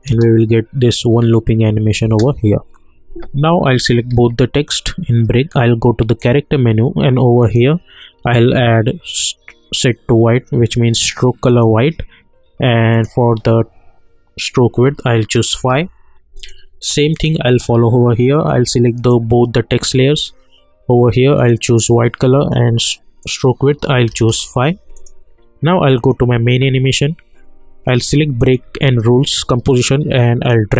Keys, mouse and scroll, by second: 0.1 space, 2.0 space, 4.1 ctrl+a, 6.2 click, 11.4 click, 15.5 Return, 16.4-21.3 drag, 24.1 Return, 24.9 click, 28.4 ctrl+click, 30.0 click.